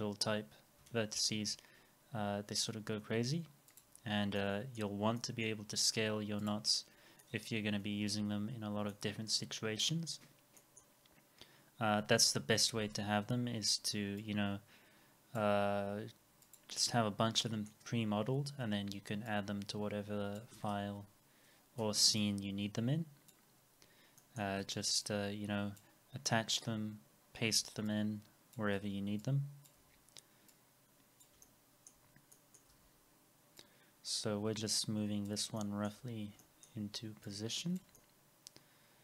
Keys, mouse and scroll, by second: 1.2 ctrl+z, 4.4 middle click, 6.9 scroll down 1, 7.2 middle click, 8.0 w, 8.4-8.9 scroll down 1, 8.9 middle click, 9.6 scroll down 1, 10.6 middle click, 17.4 middle click, 17.9 scroll up 1, 18.6 e, 20.6 alt+x, 21.8 r, 23.6 scroll, 23.6 scroll up 1, 24.2 middle click, 24.6 w, 26.0 scroll, 26.0 scroll up 1, 27.5 r, 28.8 w, 31.4 alt+middle click, 32.1 scroll down 1, 32.3 middle click, 32.7 w, 35.6 alt+middle click, 36.0 scroll up 1, 36.4 alt+middle click, 38.0 alt+middle click.